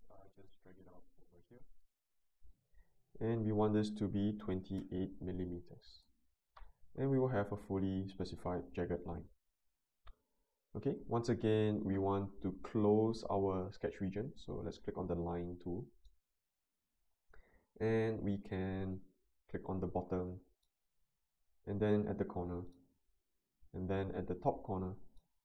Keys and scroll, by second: 4.4-4.8 typing, 5.9 Return.